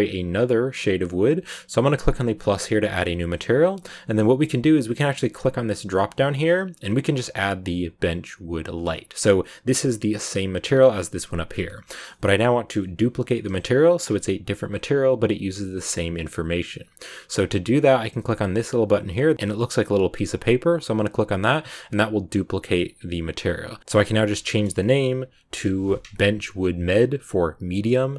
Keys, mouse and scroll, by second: 2.2-5.3 drag, 5.5-8.7 drag, 12.0-20.6 middle drag, 20.6-22.3 drag, 22.4-23.8 drag, 23.8 BackSpace.